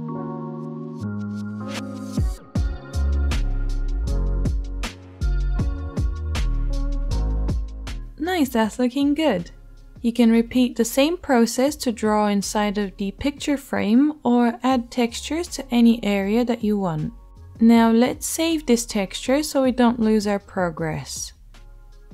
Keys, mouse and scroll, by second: 11.8-22.1 middle drag.